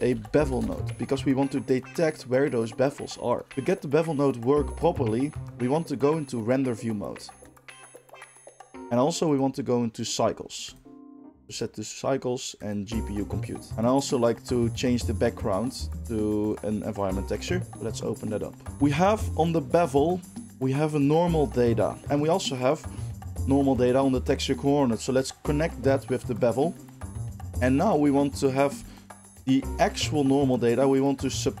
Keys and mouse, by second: 3.3 click, 3.5 middle click, 4.3-7.4 middle drag, 7.4 click, 7.5-9.3 middle drag, 9.3 click, 9.3-9.9 middle drag, 9.9-14.8 drag, 14.8-16.4 middle drag, 16.4-18.7 drag, 18.7-23.4 middle drag, 23.4-28.9 drag, 28.9 ctrl+shift+middle click, 29.0 ctrl+shift+click, 29.1-31.6 ctrl+shift+middle drag.